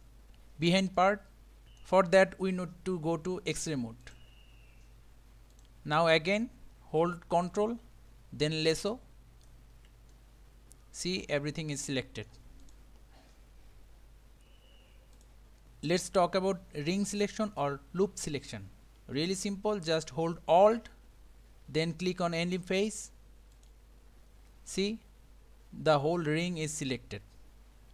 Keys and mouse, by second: 1.0-1.8 middle drag, 5.5 click, 7.5-9.5 ctrl+right drag, 10.1-12.3 middle drag, 12.6 click, 24.9-27.9 middle drag.